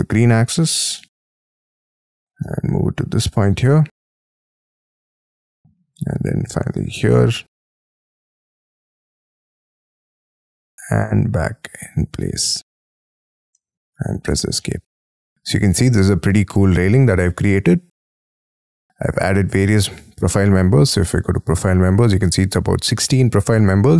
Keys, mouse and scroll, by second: 0.3-1.0 scroll down 12, 1.0 shift+middle click, 1.7 shift+middle click, 2.4 middle click, 5.1 middle click, 7.1 middle click, 7.6 Left, 8.1 right click, 10.6 middle click, 13.5 middle click, 14.1 Escape, 14.3 space, 14.6 middle click, 16.5-17.6 scroll up 19, 17.6 middle click, 19.1-19.7 scroll down 12, 19.8 middle click, 23.8-23.9 scroll up 6.